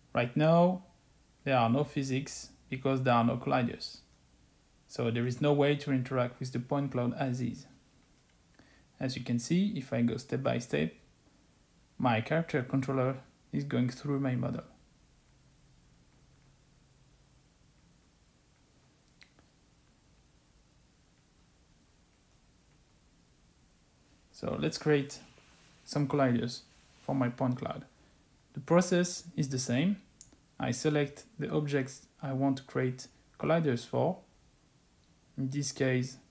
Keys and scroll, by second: 22.4 Escape.